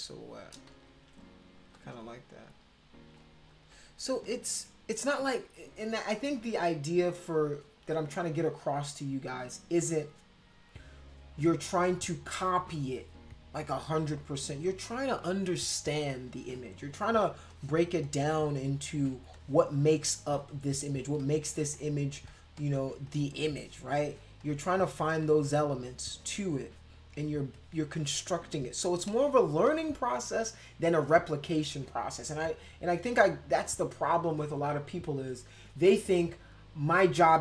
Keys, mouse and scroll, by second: 0.0 shift+click, 0.7 ctrl+z, 1.3 click, 1.7 click, 2.6 shift+click, 3.5 click, 4.2 shift+click, 17.3 space, 17.5 click, 18.0-19.1 drag, 19.3 click, 20.2 click, 21.2 click, 21.8 click, 22.3 click, 22.5 click, 23.1 click, 23.4 click, 24.0 click, 24.4 click, 24.9 click, 25.5 click, 26.1-27.3 drag, 27.5 click, 28.3 click, 29.1 click, 29.7 click.